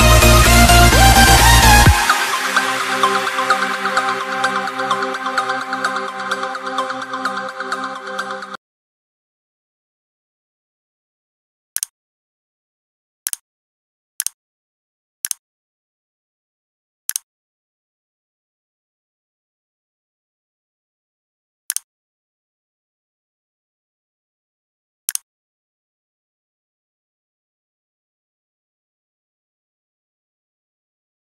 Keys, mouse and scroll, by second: 0.3 click, 3.9 c, 4.2 click, 5.1 click.